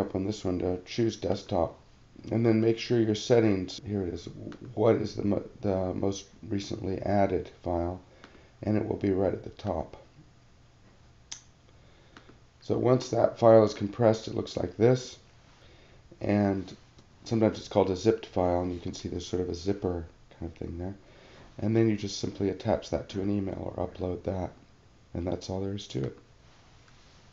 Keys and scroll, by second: 15.5 alt+super+=, 17.0 alt+super+-, 19.0 alt+super+=, 21.6 alt+super+-.